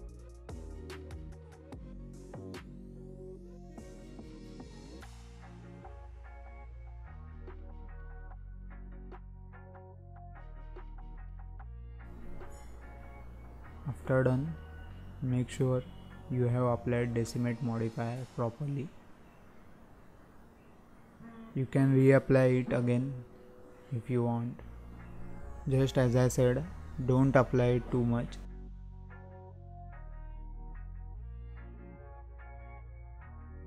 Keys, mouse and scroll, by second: 2.8 scroll down 1, 3.7-8.9 drag, 10.5-10.9 scroll up 2, 10.9-11.3 scroll down 1, 11.3-11.7 scroll up 1, 11.7-13.7 middle drag, 13.7 click, 14.7 click, 15.3 click, 16.2 click, 16.8-21.8 drag, 24.3 click, 25.7-26.1 scroll down 5, 26.1 middle click, 26.5-26.9 scroll up 1, 26.9 alt+a, 27.1 scroll down 1, 27.3-27.6 scroll up 1, 27.6-28.2 middle drag, 28.2 scroll down 2, 28.5 shift+middle click, 28.8 scroll up 1, 29.0-29.3 scroll down 1, 29.3-30.0 middle drag, 30.0-30.3 scroll up 4, 30.3-30.9 scroll down 1, 30.9 scroll down 5, 31.1-33.4 middle drag, 33.4 click.